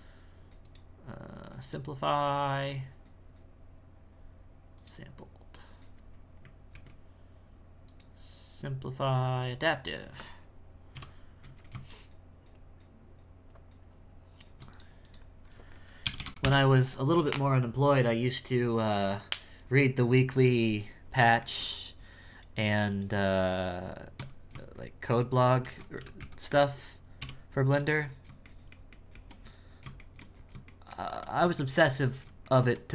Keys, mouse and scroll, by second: 0.7-3.8 drag, 6.2-6.8 scroll down 2, 6.8 ctrl+z, 7.9-9.9 drag, 9.9-11.0 scroll up 2, 15.0-16.2 drag, 16.2 BackSpace, 20.9-21.5 scroll down 2, 21.5 shift+middle click, 22.3 right click, 23.3 right click, 25.1 shift+right click, 25.6 shift+s, 28.1-28.4 scroll up 1, 28.4-29.4 shift+middle drag, 29.4-30.0 scroll up 1, 30.0 shift+middle click, 30.3 scroll up 3, 30.6-32.0 shift+middle drag, 32.0-32.4 scroll up 3, 32.4 shift+middle click, 32.8-32.9 scroll down 2.